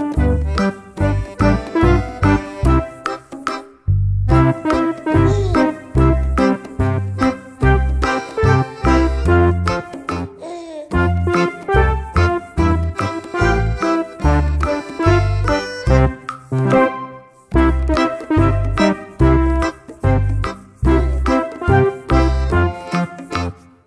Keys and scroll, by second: 9.0 ctrl+c, 9.1 ctrl+v.